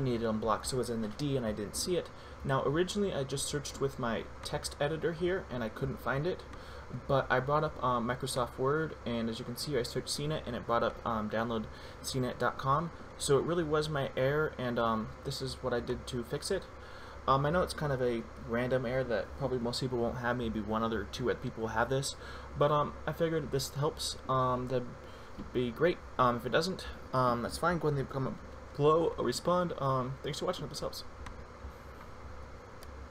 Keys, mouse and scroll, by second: 4.7 click, 31.6 click, 32.7 F12.